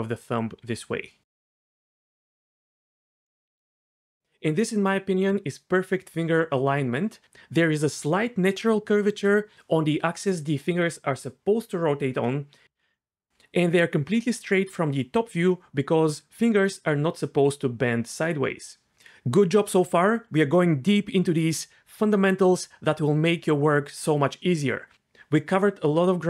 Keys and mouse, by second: 0.7 g, 1.5 click, 1.7 g, 2.5 g.